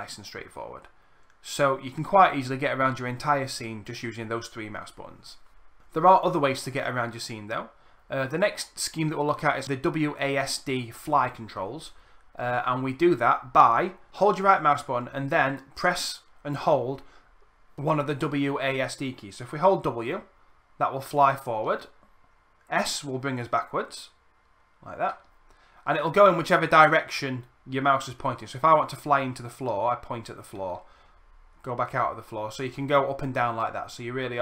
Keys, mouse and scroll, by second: 14.3-34.4 right drag, 14.3 w.